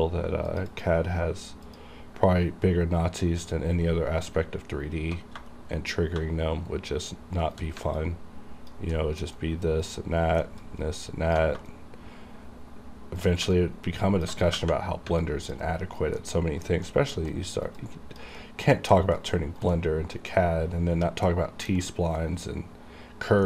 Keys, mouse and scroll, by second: 0.6 click, 0.8 click, 1.8 click, 4.4 alt+Num_Lock, 4.4 click, 5.6 shift+right click, 8.1 alt+click, 9.0 alt+middle click, 9.1 alt+middle click, 9.5 alt+right click, 10.1 alt+middle click, 10.7 alt+click, 11.8 shift+right click, 13.6 alt+click, 15.3 alt+click, 15.7 alt+right click, 16.3 alt+middle click, 16.6-17.0 alt+scroll down 2, 17.0 alt+middle click, 17.4 alt+right click, 17.9 alt+click, 18.5 alt+middle click, 19.3 alt+right click, 19.8 alt+middle click, 21.8 alt+scroll up 1, 21.9 alt+right click, 22.0-23.4 alt+right drag.